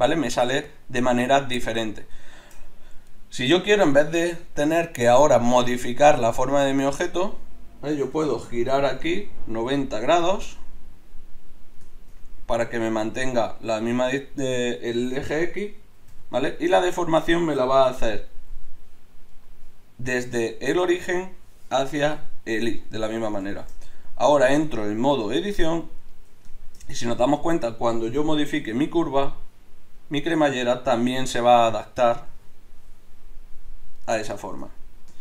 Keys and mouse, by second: 2.7 middle click, 5.3-10.5 drag, 8.1 r, 11.6-16.1 middle drag, 16.1 KP_7, 18.0 middle click, 19.3 right click, 22.8 middle click, 23.2-24.6 middle drag, 24.6 Tab, 28.7 g, 32.4 g.